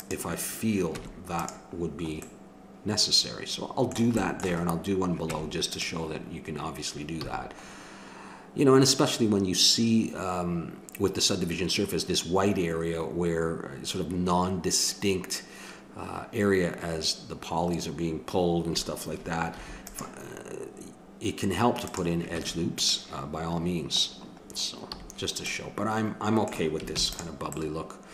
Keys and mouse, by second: 0.9 Tab, 5.3 Tab, 7.2 a, 19.5 ctrl+r, 22.4 Tab, 24.9 a, 26.9 ctrl+s.